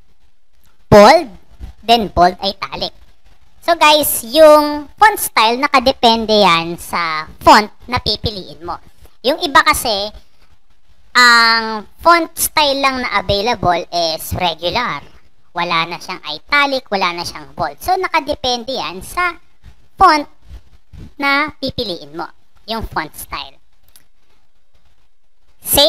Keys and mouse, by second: 0.7 click, 1.5 click, 2.3 click, 4.1 click, 18.9 click, 22.5 click, 23.4 click.